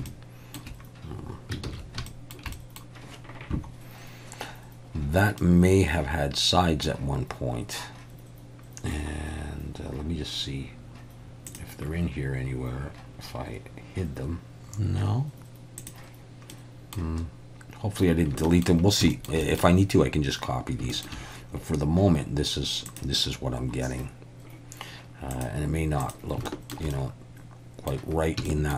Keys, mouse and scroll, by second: 0.1 shift+middle click, 1.6 ctrl+s, 2.1 shift+middle click, 2.6 middle click, 5.4-6.9 middle drag, 15.8 click, 16.5 middle click, 18.5 shift+middle click, 19.1 shift+middle click, 19.5 middle click, 20.9 shift+middle click, 22.9 click, 25.3 click, 26.0 click, 26.5 shift+middle click, 26.9 middle click, 28.5 shift+middle click.